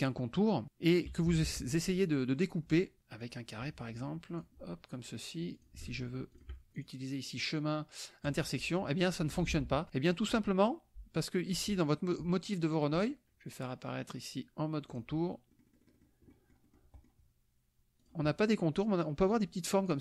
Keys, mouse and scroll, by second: 0.7 click, 1.3 KP_Subtract, 2.1 click, 3.2-4.6 drag, 5.5 click, 6.4 shift+click, 6.7 click, 8.2 click, 9.6 ctrl+z, 9.9 ctrl+click, 11.6 click, 13.0 click, 15.0 click, 15.5 click, 16.3 click, 18.0 click, 19.3 click.